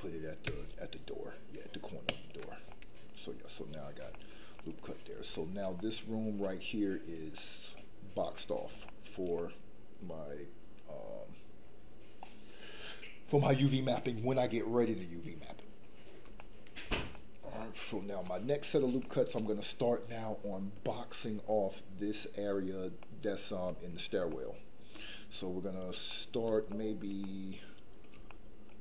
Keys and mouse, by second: 2.0 ctrl+click, 2.8-3.9 middle drag, 4.2 shift+middle click, 4.6 middle click, 5.5 shift+middle click, 5.9 middle click, 7.5 middle click, 8.3 middle click, 9.0 shift+middle click, 9.6-13.6 middle drag, 16.4 shift+middle click, 17.2 middle click, 17.6 shift+middle click, 18.4 middle click, 19.0 shift+middle click, 23.0 middle click, 24.3 shift+middle click, 26.2 middle click, 26.9 shift+middle click, 27.3 middle click, 28.3 shift+middle click.